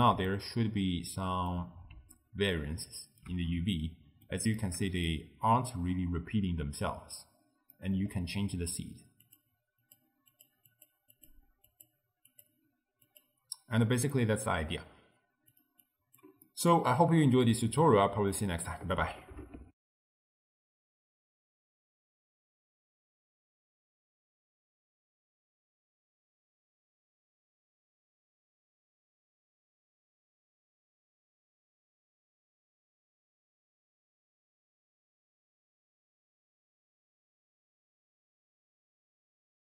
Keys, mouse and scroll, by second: 0.3-7.4 shift+middle drag, 7.4-7.8 scroll up 1, 7.8 middle click, 8.2-9.3 scroll up 1, 9.3-14.2 drag, 14.2 middle click, 14.7-15.6 scroll down 1, 15.6 click, 15.9 click, 16.5 middle click, 16.9-17.7 scroll down 10, 17.7 middle click, 18.1-18.8 scroll down 10, 18.8-19.7 middle drag, 19.7 ctrl+alt+shift+w.